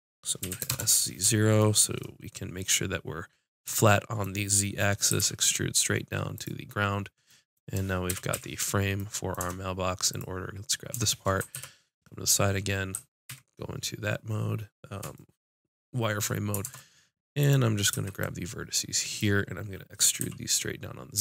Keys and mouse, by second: 0.5 s, 1.6 click, 5.1 e, 7.3 click, 8.1 KP_5, 8.4 z, 9.4 Tab, 10.1-13.3 drag, 10.9 Tab, 11.6 KP_1, 11.6 KP_5, 13.3 z, 13.6 click, 16.6 ctrl+Tab, 17.9 b, 20.2 e.